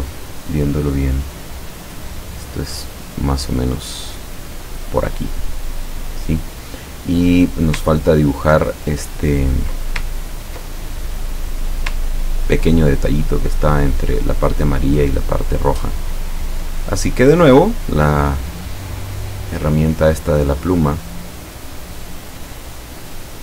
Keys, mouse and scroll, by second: 8.2 ctrl+scroll down 2, 8.7 ctrl+middle click, 10.2 ctrl+scroll down 2, 10.8 ctrl+middle click, 12.1-12.5 ctrl+scroll down 2, 15.9 click, 19.6 click, 22.6 click.